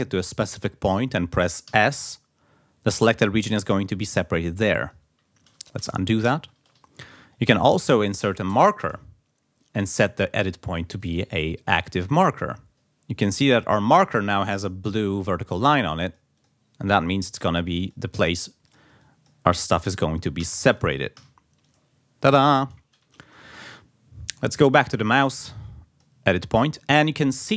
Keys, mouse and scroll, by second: 0.1 click, 1.7 s, 3.5-5.1 drag, 5.8 ctrl+z, 7.5 click, 8.5 Return, 10.0-11.5 drag, 12.1-13.1 drag, 15.5 click, 16.4 click, 17.8 click, 18.7 click, 19.0 click, 20.4 s, 20.8 click, 21.6-22.7 drag, 23.3 ctrl+z, 24.3-26.3 drag.